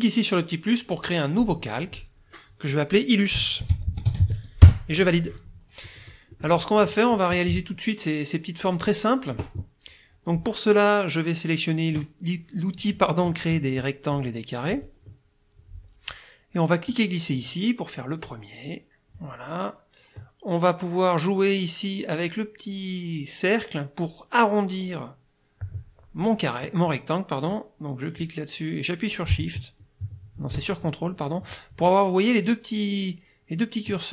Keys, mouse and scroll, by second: 1.4 click, 3.1-4.7 typing, 5.9 click, 6.9 click, 14.8 click, 16.9-19.4 drag, 28.2-31.7 drag.